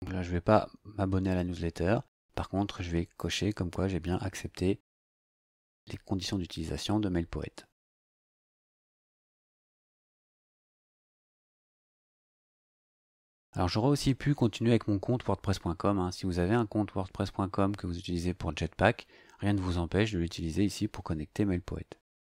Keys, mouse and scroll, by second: 3.2 click, 8.7 click, 12.6 click.